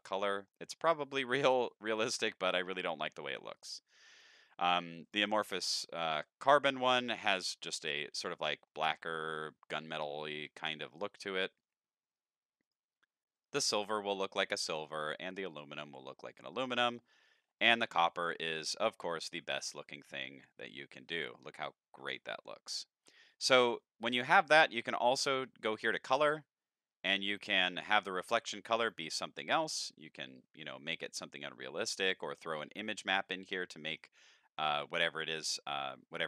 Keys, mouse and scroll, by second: 0.1 middle click, 1.0 middle drag, 1.8 middle click, 4.1 click, 5.1 click, 6.7 middle drag, 7.6 middle drag, 8.6 middle click, 11.6 click, 12.6 click, 13.4 click, 14.5 click, 15.3 click, 16.5 click, 18.6 middle click, 19.4-21.4 middle drag, 23.2 middle click, 24.3 click, 24.9 middle click, 26.0 click, 27.3 click, 28.8 click, 29.5 click, 30.5 click, 32.1 click, 33.7 middle click, 35.0-36.2 drag.